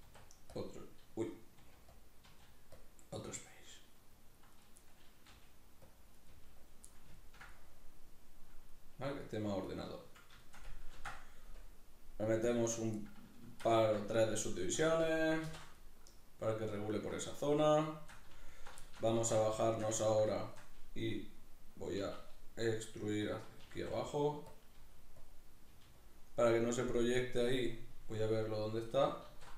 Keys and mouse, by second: 0.1 q, 4.5 right click, 4.8-6.2 middle drag, 5.3 g, 5.9 click, 6.2 right click, 6.3 g, 6.7 click, 6.9-14.8 middle drag, 11.0 ctrl+r, 12.8 right click, 14.8 a, 16.0 shift+n, 16.0 middle click, 17.4 z, 17.9 shift+middle click, 18.5 alt+right click, 18.8 shift+middle click, 19.2 alt+q, 19.6 shift+middle click, 22.0 e, 23.3 click, 23.7 s, 24.6 click, 24.8 g, 25.3 click, 25.7 g, 26.1 click, 27.9 g, 28.9 click, 29.3 alt+q.